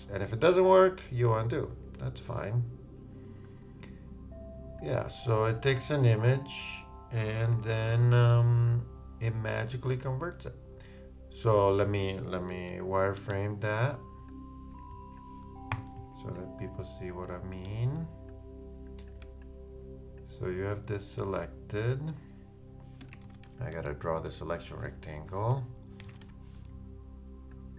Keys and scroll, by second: 7.5 super+z, 8.3 shift+super+z, 12.5 super+-, 15.7 super+g.